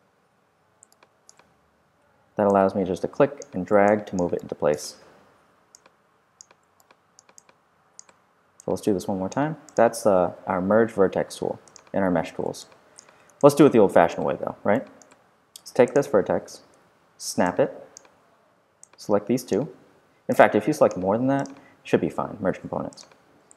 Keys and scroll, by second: 13.1 super+q, 16.4 w, 16.7 v.